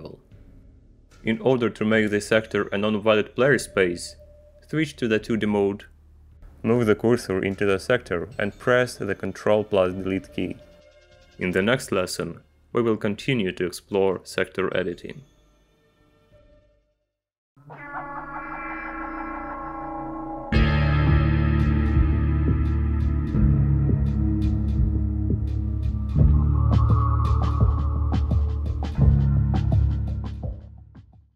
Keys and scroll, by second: 5.7 Return, 10.3 ctrl+Delete, 12.2 Return.